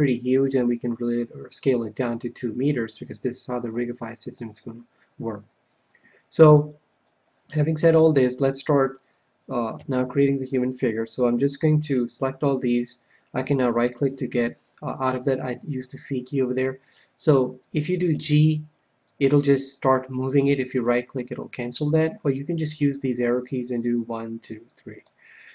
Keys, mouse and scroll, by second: 7.5 a, 7.9 a, 9.7 c, 13.7-15.8 right drag, 18.1 g, 20.9-22.7 right drag, 24.8 click.